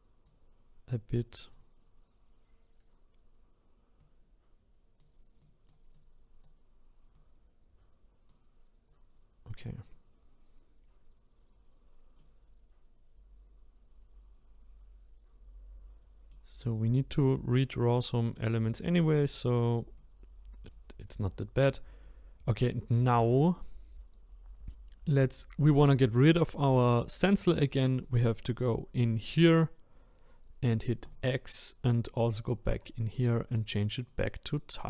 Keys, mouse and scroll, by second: 5.9-7.1 right drag, 7.1-10.3 drag, 12.2-15.2 middle drag, 17.0-20.0 right drag, 20.0-22.0 drag, 22.0-26.0 middle drag, 27.9 click, 31.0-32.2 drag, 32.7 scroll down 11, 34.0-34.8 drag.